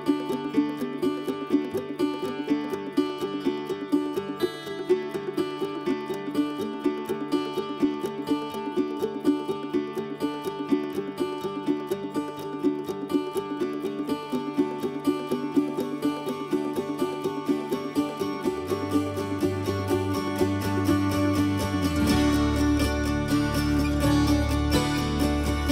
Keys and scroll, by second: 0.7-2.1 typing, 2.3 Return, 4.2-5.2 typing, 5.9 Delete, 7.2 Delete, 8.4 ctrl+h, 9.6 ctrl+z, 9.7 ctrl+z, 10.7 ctrl+h, 11.9 ctrl+z, 12.3 ctrl+z, 13.4 ctrl+h, 15.0-16.5 typing, 17.4 Delete, 17.8 Delete, 19.2 p, 20.9-21.7 typing, 22.7 ctrl+g.